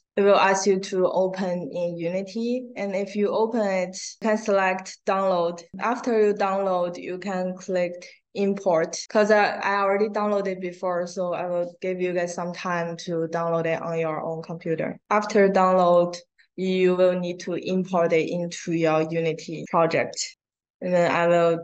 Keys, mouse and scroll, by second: 15.8 click, 19.6 scroll down 1, 20.4 click.